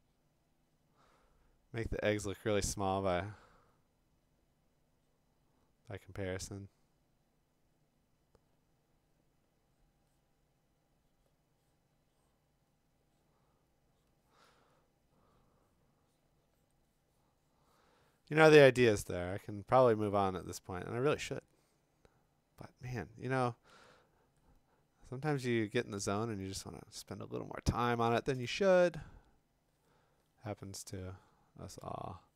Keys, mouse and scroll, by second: 31.4 scroll, 31.5-32.2 typing, 31.7 click.